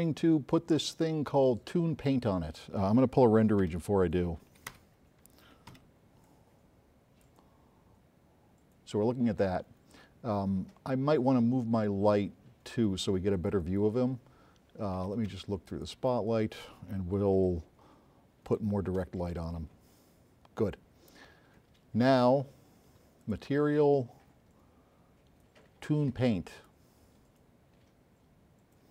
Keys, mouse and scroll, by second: 3.8 q, 4.8 Escape, 6.0 q, 6.3-7.4 drag, 13.4 click, 15.8 click, 17.5-18.7 right drag, 17.5 s, 23.3 click, 26.6 click.